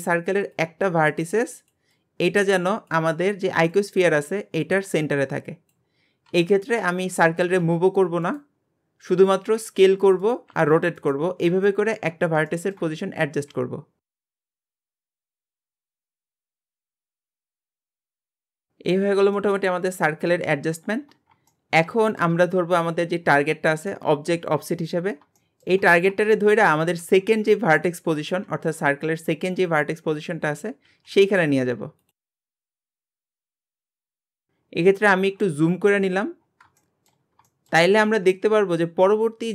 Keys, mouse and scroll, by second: 6.6-7.0 scroll down 5, 7.0 shift+middle click, 7.6 g, 11.4 scroll up 3, 11.7-12.1 shift+middle drag, 12.1 scroll up 1, 12.5 shift+middle click, 12.9 scroll up 1, 13.5 s, 14.5 scroll up 3, 14.6 shift+middle click, 14.8-18.0 typing, 15.3 scroll up 4, 15.3 shift+middle click, 16.2 shift+middle click, 16.9 scroll up 3, 17.0 shift+middle click, 18.5 scroll down 16, 19.4-19.8 shift+middle drag, 20.8 scroll down 8, 21.5-22.8 shift+middle drag, 22.8 click, 25.0-25.4 scroll up 2, 25.4-25.9 shift+middle drag, 25.9 scroll up 1, 26.3-26.7 shift+middle drag, 26.7 scroll up 2, 29.1-29.6 scroll down 10, 30.0 scroll up 1, 30.9 g, 32.2 scroll up 5, 32.3 shift+middle drag, 32.6 shift+middle click, 32.7 scroll up 1, 32.9 g, 33.6-34.1 scroll up 5, 33.8 shift+middle click, 34.1 g, 34.6-36.8 scroll down 15, 36.8-39.5 shift+middle drag.